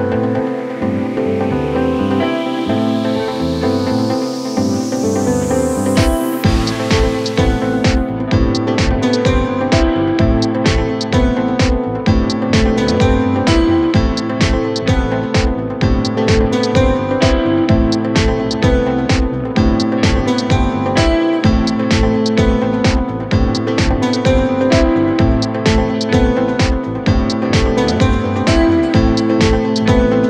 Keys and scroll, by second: 0.2 4, 0.8 3, 7.7 Delete, 10.0 ], 10.2 End, 10.5 Delete, 15.0 4, 15.5 3, 17.6 ], 26.5 ], 29.9 Escape.